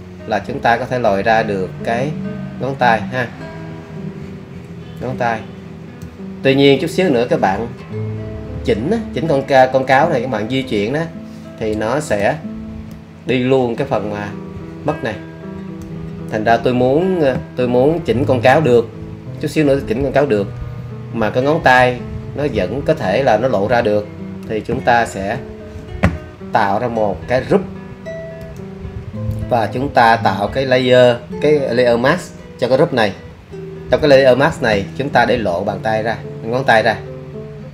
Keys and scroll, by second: 18.2 super+z, 25.1 super+z.